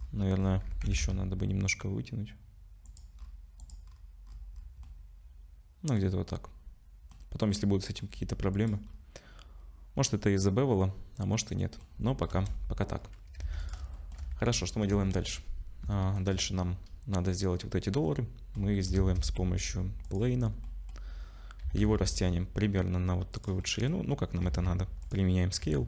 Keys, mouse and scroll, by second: 0.0-0.7 scroll down 9, 0.0 g, 0.7 g, 3.2-3.6 scroll up 5, 3.6 click, 3.9 scroll up 2, 4.3-4.8 scroll down 7, 4.8 middle click, 7.5 middle click, 8.6 click, 8.9 scroll up 3, 9.6-10.6 scroll down 1, 11.4 middle click, 12.3 KP_0, 13.0 scroll down 4, 13.4 ctrl+s, 13.6 click, 13.9 shift+middle click, 14.5 scroll up 4, 15.0 ctrl+s, 15.9 shift+middle click, 17.6-18.1 scroll down 3, 18.1 middle click, 18.6 scroll down 2, 19.0 shift+a, 20.7 middle click, 20.9-21.7 scroll down 3, 21.7 s, 23.6 middle click, 24.5 ctrl+a, 25.3 middle click, 25.6 Tab.